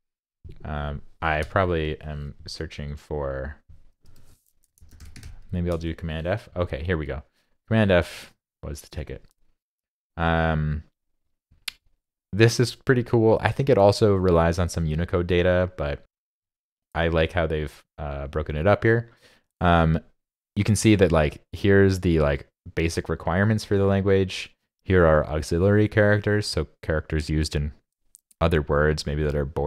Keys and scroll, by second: 4.2 super+f.